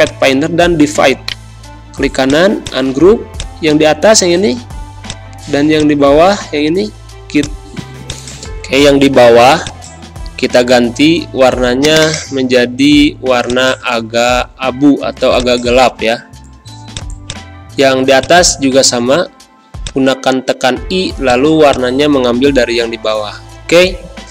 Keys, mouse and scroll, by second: 1.2 right click, 2.2 click, 4.0 ctrl+z, 5.0 shift+click, 6.7 ctrl+z, 7.3-15.3 drag, 19.2 i, 19.8 click, 23.3 scroll down 1.